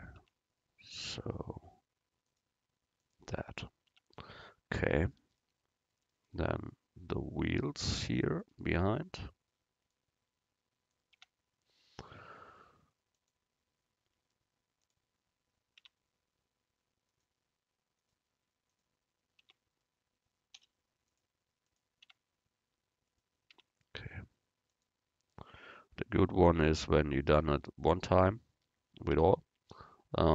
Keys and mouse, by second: 0.3 Tab, 1.1 u, 4.0 Tab, 7.4-10.1 right drag, 11.2 Tab, 13.2-15.1 drag, 15.9 Tab, 18.9 Tab, 19.5 Tab, 20.6 u, 22.1 Tab, 23.6 Tab, 29.2 Tab.